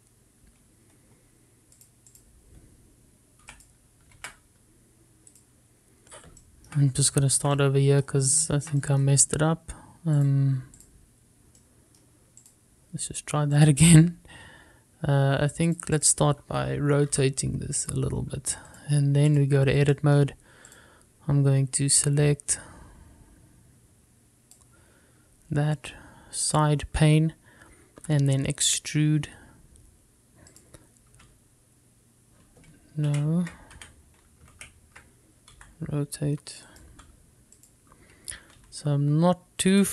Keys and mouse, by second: 2.9 click, 4.6 x, 5.3 shift+a, 7.5 shift+middle drag, 8.3 shift+middle drag, 8.6-9.1 middle drag, 9.6 shift+middle click, 9.9 middle click, 11.3 click, 12.7 middle click, 16.8 click, 18.2 r, 18.9 click, 19.8-20.5 drag, 21.0 middle click, 21.8 click, 23.8-25.7 drag, 27.6 click, 29.1 e, 31.6 click, 32.3 e, 34.2 ctrl+z, 34.9 Escape, 35.7 ctrl+z, 36.6 r, 37.8 click, 38.0 g, 38.7 click, 39.7 e.